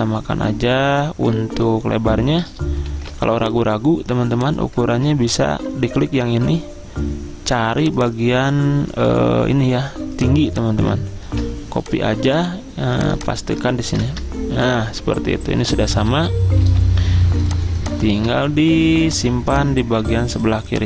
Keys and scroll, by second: 3.0 ctrl+g, 5.0 ctrl+z, 11.4 ctrl+c, 14.0 ctrl+v, 14.2 Return, 16.8 t.